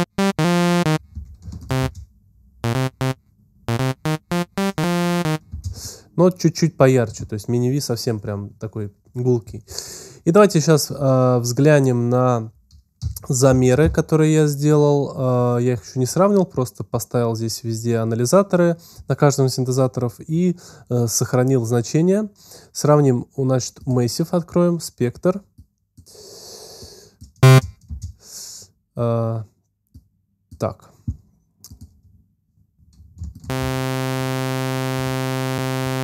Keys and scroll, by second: 1.3 alt+space, 2.6 space, 6.3 space, 12.8 z, 13.7 x, 27.3 space, 33.4 alt+space, 34.3 space.